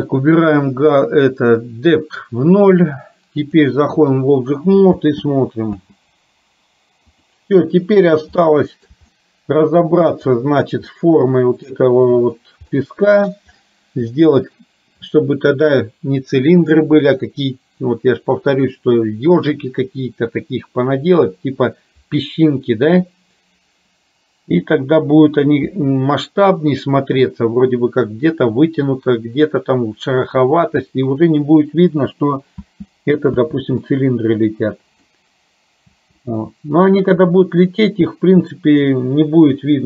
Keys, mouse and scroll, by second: 3.7 click, 5.0 space, 5.8 space, 7.1 click, 8.5 middle click, 9.3 shift+middle click, 11.2 middle click, 12.8 middle click, 14.1 middle click, 32.6 space, 33.4 space, 33.9-35.2 middle drag, 35.9 space.